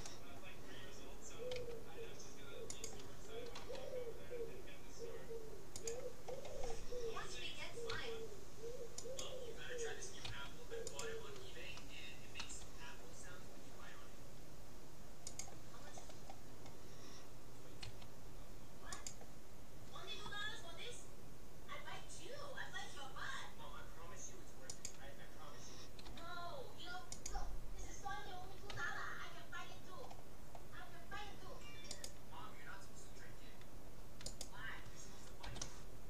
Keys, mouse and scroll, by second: 1.6 s, 3.6 r, 6.4-8.6 middle drag, 8.0 s, 10.4 s, 12.6 g, 16.0-16.8 scroll up 1, 16.8-18.2 middle drag, 18.0 s, 20.2 r, 26.2 g, 28.8 a, 30.0-32.0 middle drag, 32.0-33.6 right drag, 34.4-36.0 right drag, 35.4 g.